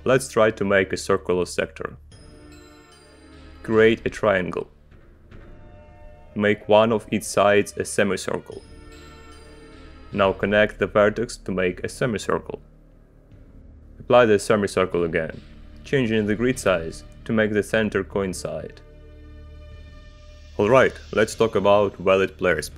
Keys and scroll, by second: 2.6 shift+g, 5.6 space, 8.8 c, 10.1 space, 15.1 c, 17.1 g, 19.0 space.